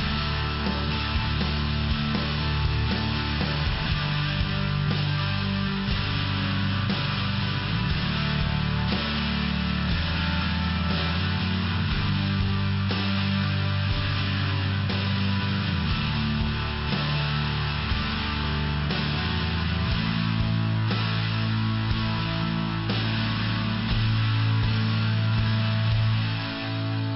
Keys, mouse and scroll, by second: 0.7 click, 0.9 click, 1.4 click, 1.6 click, 2.2 click, 2.3 click, 2.9 click, 3.0 click, 3.4 click, 3.5 click, 3.9 click, 4.0 click, 4.1 click, 5.1 click, 5.2 click, 5.7 click, 5.8 click, 6.3 click, 6.4 click, 7.1 click, 7.2 click, 7.6 click, 7.7 click, 8.4 click, 8.4 click, 9.0 click, 9.1 click, 9.7 click, 9.8 click, 10.1 click, 10.2 click, 10.6 click, 10.7 double click, 11.3 double click, 11.4 double click, 11.8 double click, 11.9 double click, 13.7 click, 16.7 click, 18.7 click, 19.3 click, 19.4 click, 19.7 click, 19.8 double click, 20.2 double click, 20.3 double click, 20.7 double click, 20.7 double click, 21.1 double click, 21.2 double click, 21.5 double click, 21.7 double click, 22.3 click, 22.4 click, 23.3 click, 23.4 click, 23.8 click, 23.8 click, 24.5 click, 24.5 click, 24.8 click, 25.0 click, 25.3 click, 25.4 double click, 26.1 double click, 26.2 double click, 26.7 double click, 26.8 click.